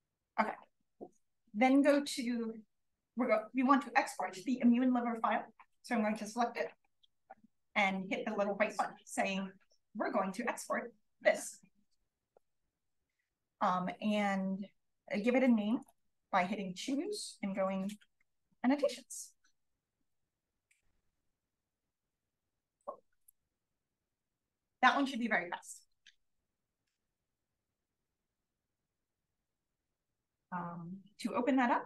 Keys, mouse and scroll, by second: 1.7 click, 6.0 click, 7.3-9.4 drag, 12.7-15.0 drag, 15.6-17.2 drag, 22.5 click, 27.1 click, 27.8 click.